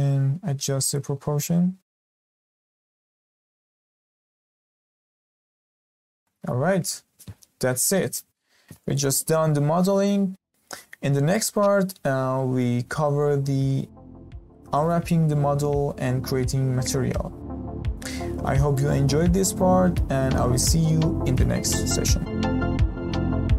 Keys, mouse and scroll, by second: 1.6-2.0 scroll down 6, 2.0 middle click, 2.4 z, 2.8 scroll down 2, 3.1-4.6 shift+middle drag, 4.6 click, 5.0 scroll down 1, 5.3-5.8 shift+middle drag, 5.8-6.2 scroll up 1, 6.2-9.3 shift+middle drag.